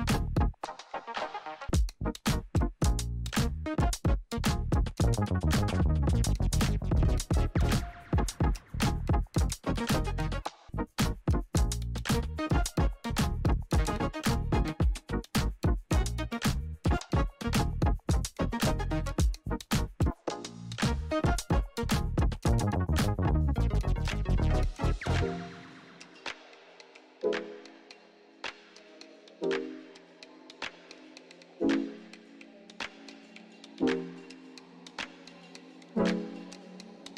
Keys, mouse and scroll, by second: 2.3 r, 3.4-5.2 drag, 10.8 click, 11.8 Return, 13.5 click, 16.0 ctrl+n, 17.9-20.0 typing, 21.3 click, 24.0 click, 25.6 ctrl+y, 27.0-27.9 typing, 28.2 Return, 29.9 click, 31.2 ctrl+a, 31.5-32.9 typing, 33.5 click, 36.0-37.1 drag.